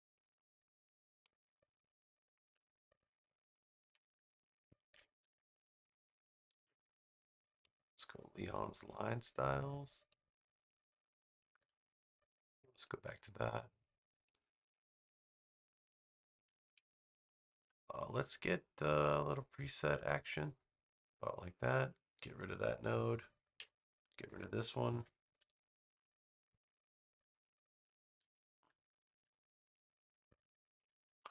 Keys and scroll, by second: 6.6 v, 23.5 BackSpace, 28.8 6, 29.0 Return, 30.2 a.